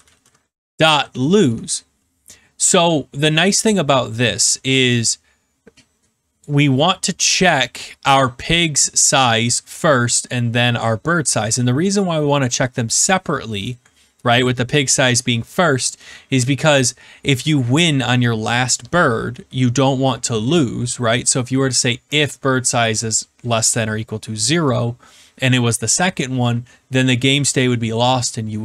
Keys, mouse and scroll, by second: 0.0-1.7 typing, 6.3 click, 7.5 click, 9.7 click, 11.1 click.